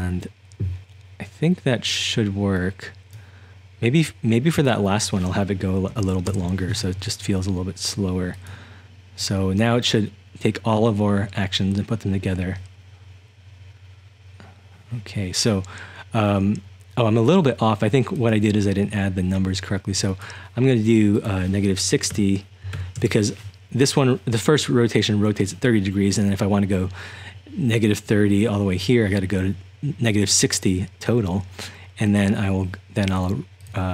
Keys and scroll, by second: 6.2 typing, 6.3 Return, 22.1-23.2 typing.